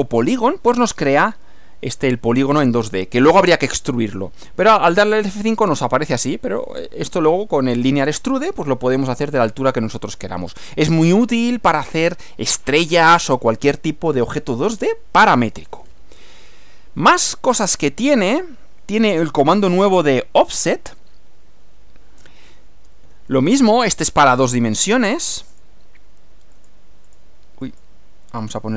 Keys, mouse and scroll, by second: 4.7 click, 5.2 F5, 5.6-6.8 drag, 9.8 click, 17.0 click, 18.4 click, 20.4 click, 23.0 F6, 24.7 click, 25.6 click, 26.6 click, 27.1 click, 27.7 click, 28.4 click.